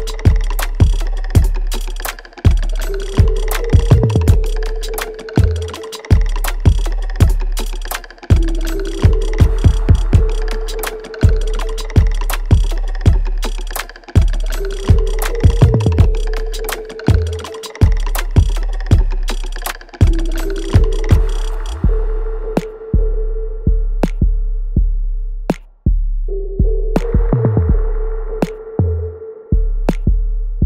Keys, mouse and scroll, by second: 4.2 alt+right click, 4.8-6.3 alt+drag, 6.3 alt+right click, 6.7-8.0 alt+drag, 8.0 alt+right click, 8.3 alt+click, 8.9 alt+middle click, 9.3 alt+right click, 9.8 alt+click, 10.4 alt+middle click, 11.3-12.7 alt+right drag, 12.7 click, 14.4 alt+right click, 15.7 ctrl+z, 17.3 click, 22.4-24.0 drag, 24.0-30.2 ctrl+drag, 30.2 alt+right click.